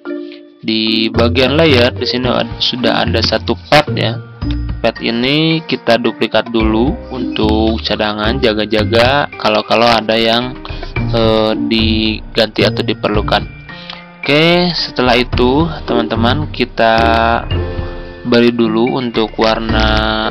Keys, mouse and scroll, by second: 1.0 click.